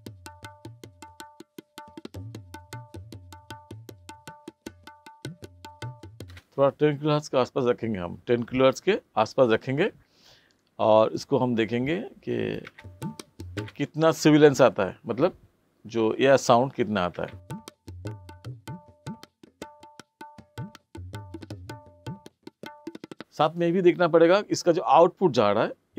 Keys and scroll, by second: 6.3 space, 12.7 space, 17.1 space.